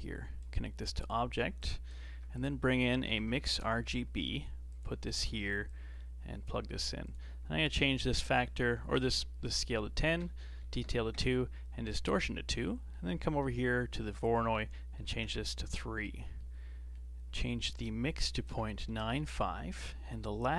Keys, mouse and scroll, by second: 0.4 click, 1.6 click, 2.1 shift+a, 5.7 click, 7.0-10.1 drag, 12.0 scroll down 2, 12.3-14.2 middle drag, 14.2-16.3 drag, 16.3-17.7 middle drag, 17.7-20.2 drag, 20.2 middle click.